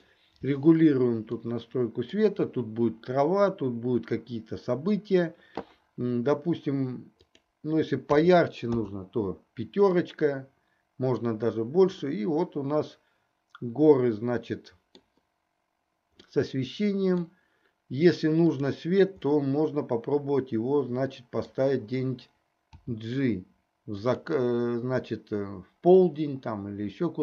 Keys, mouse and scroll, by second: 1.5-2.2 middle drag, 7.2-9.2 drag, 10.3-11.8 middle drag, 12.7-15.6 middle drag, 16.7-17.5 middle drag, 19.9-22.0 middle drag, 22.8 g, 26.0-27.2 drag.